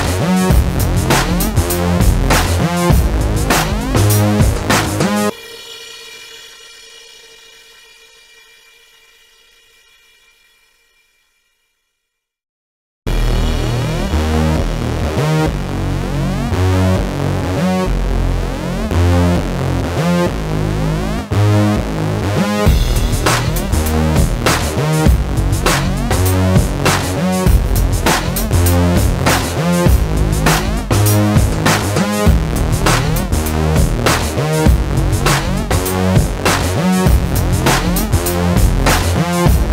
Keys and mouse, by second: 0.2 a, 0.5 Tab, 0.7 KP_1, 1.1 z, 1.7 click, 2.7 s, 3.5 z, 4.2 Tab, 4.5 click, 5.2 z, 5.7 Tab, 6.9 Tab, 7.0 z, 7.5 click, 7.7 ctrl+r, 8.5 click, 11.8-14.5 typing, 13.5 Tab, 14.9 click, 15.5 a, 15.8 b, 16.4 click, 17.7 z, 17.9 middle click, 18.1 a, 18.5 a, 18.7 w, 19.6 middle click, 20.6 ctrl+z, 20.9 middle click, 21.2 ctrl+r, 23.5 ctrl+r, 24.3 middle click, 24.8 ctrl+r, 25.6 middle click, 26.5-29.0 typing, 29.5 click, 30.2 click, 30.6 a, 31.7 ctrl+b, 33.0 s, 34.2 ctrl+b, 35.5 ctrl+KP_Subtract, 35.7 alt+s, 36.5 alt+o, 36.7 alt+s, 37.7 ctrl+z, 37.8 alt+s, 39.3-39.7 middle drag.